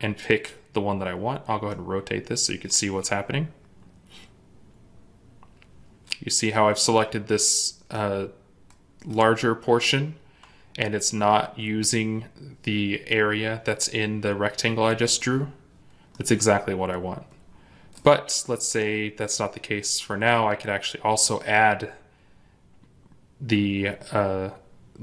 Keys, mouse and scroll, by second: 1.3 scroll up 1, 1.6 middle click, 15.8 scroll up 1, 16.0 middle click, 18.2 scroll down 1.